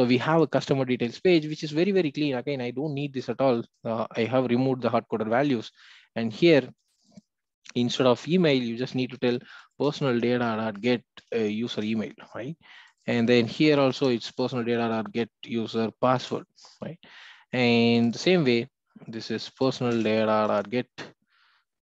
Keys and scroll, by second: 9.8 Return, 18.4 Return.